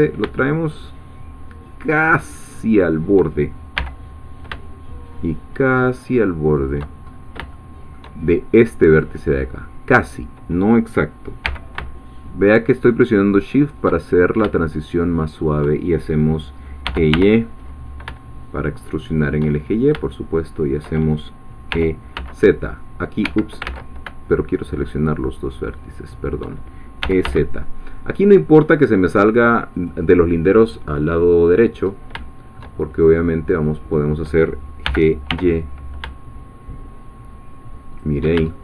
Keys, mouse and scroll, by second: 2.7 shift+click, 3.8 g, 6.6 shift+click, 7.0-7.4 shift+scroll up 1, 7.5-8.5 shift+middle drag, 9.0-10.2 drag, 11.4 g, 13.6 shift+click, 14.2 shift+scroll down 1, 14.6 shift+middle click, 16.6-17.6 typing, 19.0 shift+click, 19.6-20.0 shift+scroll down 2, 20.0-21.3 shift+middle drag, 21.7 e, 22.2 z, 23.2 Escape, 23.6 ctrl+z, 25.8 shift+click, 26.8-27.7 typing, 29.7-31.8 drag, 31.8 scroll up 2, 32.2 shift+middle click, 33.6 click, 34.8 g, 35.3 y, 37.9 shift+click, 38.5 shift+middle click.